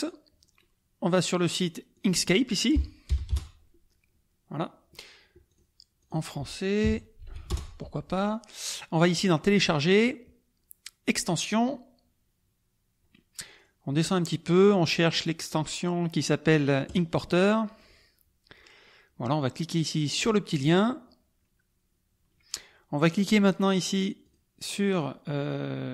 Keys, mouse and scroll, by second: 1.1 click, 2.0-3.1 drag, 3.1 BackSpace, 3.3 Return, 5.5 click, 7.0-7.8 typing, 11.2 click, 13.4-13.8 scroll down 1, 14.0-14.6 scroll down 1, 17.0 click, 20.3 click, 24.2 click.